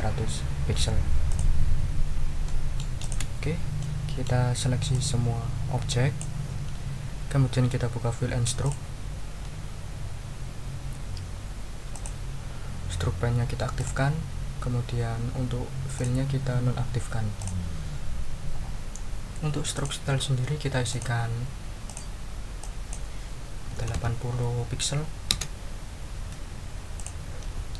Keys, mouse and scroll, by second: 1.3 click, 2.4 click, 3.0 click, 3.5 ctrl+scroll down 2, 3.8 ctrl+click, 4.9-6.4 drag, 8.6 click, 11.9 click, 13.8 click, 15.9 click, 17.4 click, 19.7 click, 20.9 click, 21.8 click, 22.6 click, 23.5-24.4 typing, 25.3 Return, 26.9 click.